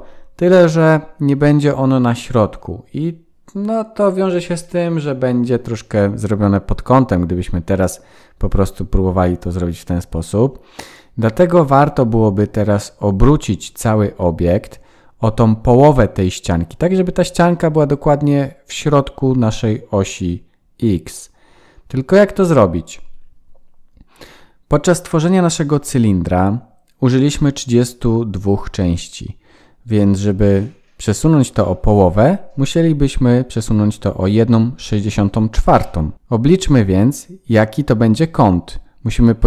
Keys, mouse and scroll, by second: 12.0-12.7 scroll down 3, 12.9 shift+middle click, 19.0-20.0 scroll up 5, 34.2 Tab.